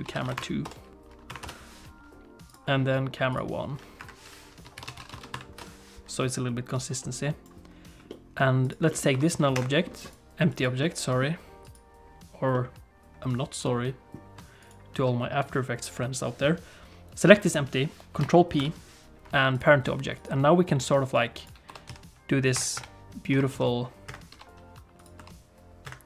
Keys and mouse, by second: 2.5 click, 4.0 F2, 6.8 click, 8.1 middle click, 8.9 middle click, 9.1 r, 9.7 middle click, 10.1 right click, 10.8 middle click, 11.6 click, 12.5-13.7 middle drag, 14.6 shift+click, 18.6 ctrl+p, 21.2 click, 21.7 r, 22.8 KP_7, 23.3 r, 24.3 g, 25.2 r.